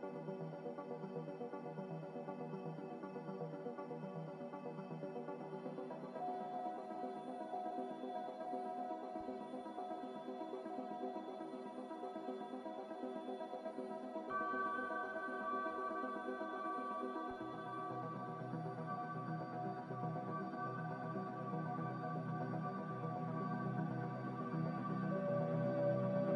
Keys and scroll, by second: 1.1 a, 4.3 q, 4.8 q, 7.4 typing, 21.4 z, 25.5-26.3 typing.